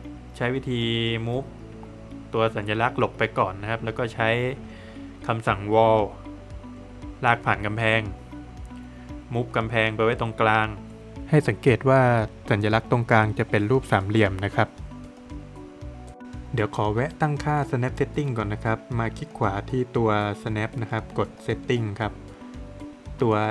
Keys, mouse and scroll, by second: 0.8 click, 1.6 scroll up 1, 2.3 middle click, 3.4 click, 6.5 click, 7.9 space, 8.4 Escape, 9.1 click, 9.5 double click, 10.0 scroll up 1, 11.3 space, 12.9 space, 13.0 click, 16.6 click, 17.2-17.5 scroll down 1, 17.5 middle click, 17.9 Escape, 19.9 right click, 20.7 click, 22.3 click, 22.4 click.